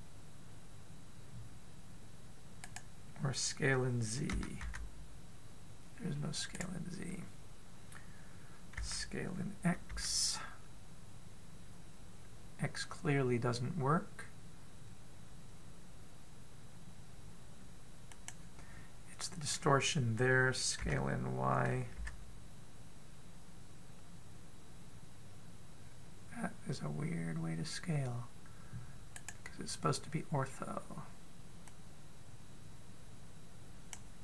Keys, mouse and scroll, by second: 5.2 s, 9.6 s, 21.7 s, 32.5 click.